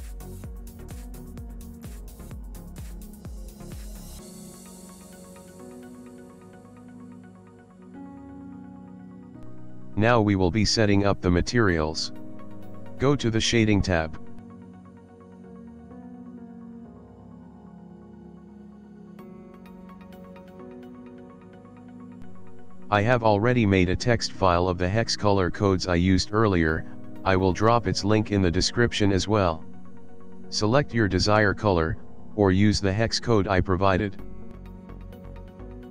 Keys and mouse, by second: 0.4 middle click, 2.8 middle click, 4.2 s, 5.9 ctrl+middle click, 6.2 middle click, 6.5 click, 7.3 shift+middle click, 8.4 middle click, 9.2 middle click, 9.7 shift+middle click, 10.6 ctrl+middle click, 11.3 shift+middle click, 11.7 ctrl+middle click, 12.1 shift+middle click.